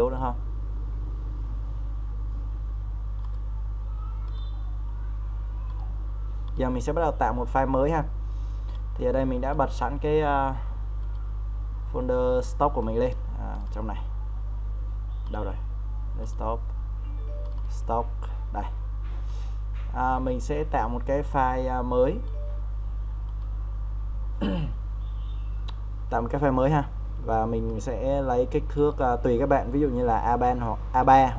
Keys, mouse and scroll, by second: 10.2-23.2 drag.